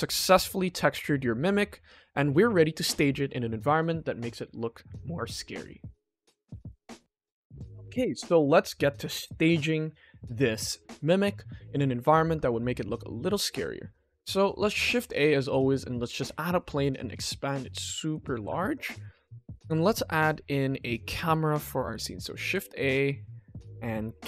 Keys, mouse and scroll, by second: 11.2 click, 11.7-12.1 middle drag, 13.4 ctrl+s, 14.1 shift+a, 16.2 s, 19.2 middle click, 19.7 ctrl+s, 20.5 middle click, 21.0-21.7 scroll down 2, 21.7 middle drag, 22.3 shift+a.